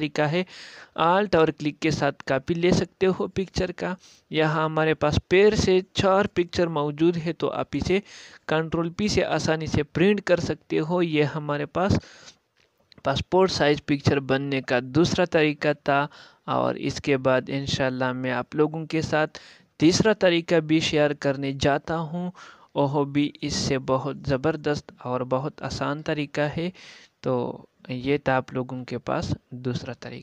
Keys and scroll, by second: 5.1 alt+space, 10.3 ctrl+p.